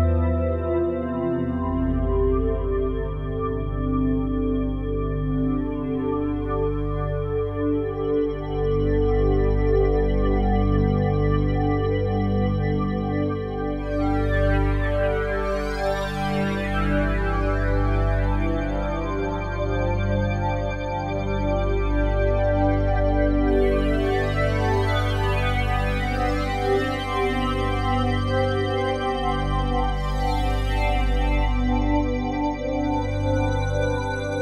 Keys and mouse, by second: 0.6 Escape, 1.3 shift+click, 2.3 g, 3.4 click, 4.9 click, 5.5 click, 6.6 g, 7.2 click, 8.8 click, 10.0 g, 11.8 Escape, 12.5 shift+click, 13.5 g, 14.0 click, 14.7 click, 15.2-16.7 shift+drag, 16.7 g, 18.9 z, 19.7 Escape, 21.1 z, 22.0-28.2 drag, 25.7 ctrl+s, 29.5-30.0 drag, 30.7 click, 32.0 alt+shift+click, 33.1 click, 34.2 click.